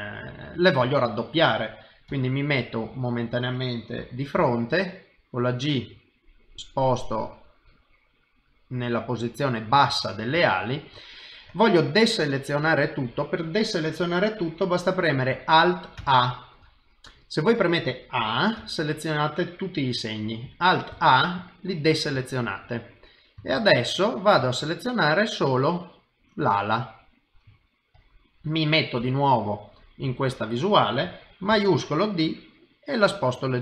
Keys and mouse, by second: 0.2 middle click, 0.9 shift+middle click, 2.1 KP_1, 4.4 g, 7.9 middle click, 9.9 middle click, 10.4 shift+middle click, 16.0 alt+a, 16.8 middle click, 18.6 a, 20.9 alt+a, 21.4 middle click, 22.2 shift+middle click, 22.7 middle click, 23.5 shift+middle click, 23.9 middle click, 24.7 ctrl+right click, 27.7 middle click, 29.0 KP_1, 30.3 shift+middle click, 31.5 shift+d.